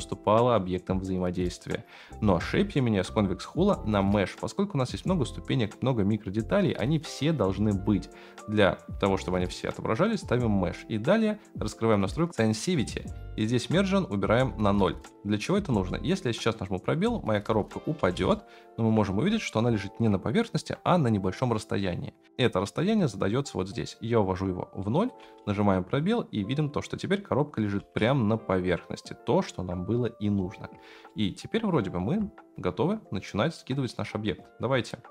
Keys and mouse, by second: 3.3-5.1 middle drag, 15.7 space, 18.2 shift+space, 18.3-18.9 shift+middle drag, 19.8 shift+middle drag, 23.7 middle click, 25.2 space, 28.1 space, 31.1-31.7 shift+middle drag, 33.6-35.1 drag.